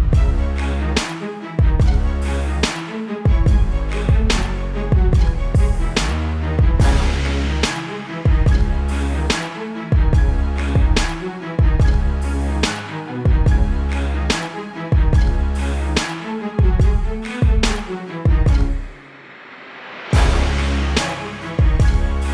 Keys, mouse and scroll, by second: 1.9 click, 17.1 BackSpace, 18.5 click.